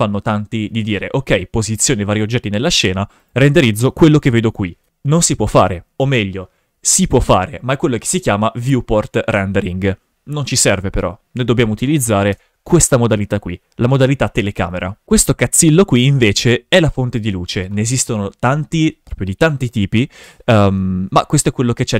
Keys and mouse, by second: 0.7 shift+f, 12.3 KP_0, 15.0 right click, 16.1 shift+f, 20.7 w.